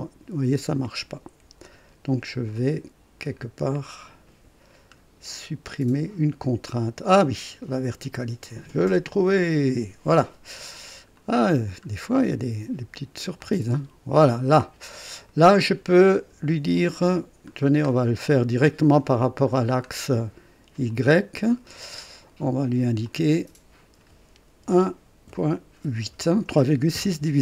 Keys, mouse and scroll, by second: 1.6 Escape, 2.5-2.8 scroll up 1, 3.6-3.9 scroll down 1, 4.9 scroll up 1, 8.7 click, 9.7 Delete, 11.1 click, 11.5-11.8 scroll down 1, 13.3-14.9 drag, 15.1 click, 16.7 click, 17.5 scroll down 1, 18.2 scroll down 1, 18.6 right click, 20.8 click, 23.0 click, 24.6 KP_1, 25.2 KP_Decimal, 26.0 KP_8, 26.9 KP_Enter.